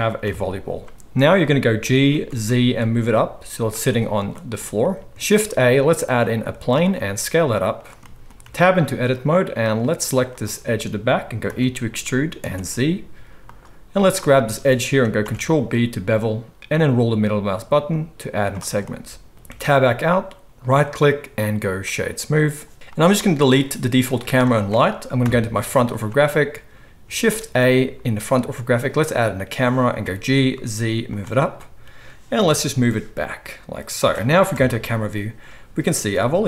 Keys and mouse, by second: 0.2 KP_1, 1.8 g, 5.2 shift+a, 6.8 s, 8.0 click, 8.2 right click, 8.4 Tab, 8.4-9.6 drag, 9.6 middle click, 10.4-13.4 right drag, 11.5 e, 13.4 click, 14.0 middle click, 14.1 shift+right click, 14.6 middle click, 14.8 right click, 15.0 ctrl+middle click, 15.2 ctrl+b, 15.2-19.3 ctrl+drag, 18.8 middle click, 19.5 Tab, 19.8-22.3 drag, 19.8-22.5 middle drag, 19.8-22.3 right drag, 22.8 alt+a, 22.8 click, 22.9 middle click, 23.0-24.1 right drag, 23.2 x, 24.1 middle click, 24.2-26.0 right drag, 24.4 x, 25.2 KP_1, 26.0 shift+middle click, 26.1-30.5 right drag, 26.8 x, 27.2 shift+a, 30.0 g, 30.5-31.4 drag, 31.4 right drag, 31.5-31.8 drag, 31.8 right click, 32.4-34.6 drag, 32.4 g, 34.5 KP_0, 34.6-36.4 right drag, 36.1 g.